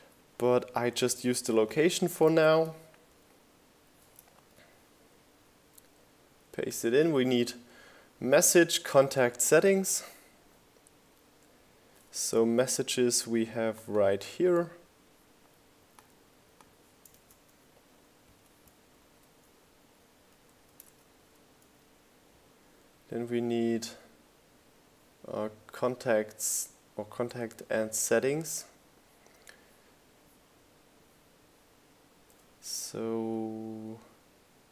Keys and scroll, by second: 12.2 super+c, 13.9 super+v, 15.9 super+v.